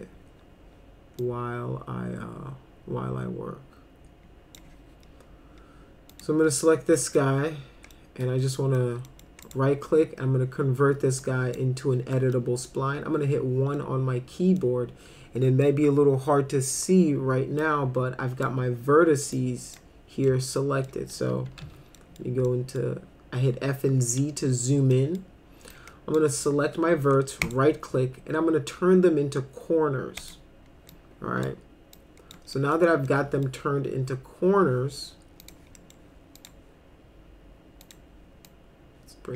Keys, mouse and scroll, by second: 1.2-4.6 drag, 6.1 click, 7.0 middle click, 8.0 middle click, 8.6 middle click, 9.1 middle click, 9.5 right click, 11.2 click, 12.2 middle click, 12.8 1, 13.8 middle click, 15.6-16.7 middle drag, 17.6 click, 19.3 click, 20.3 alt+middle click, 21.2-22.1 typing, 22.0 middle drag, 22.5 middle click, 24.9 middle click, 25.7 click, 27.5 right click, 30.2 click, 30.9 click, 32.0 click, 32.5 middle click, 33.1 middle click, 35.4 click, 35.8 middle click, 36.4 click, 37.8 click, 38.5-39.3 drag.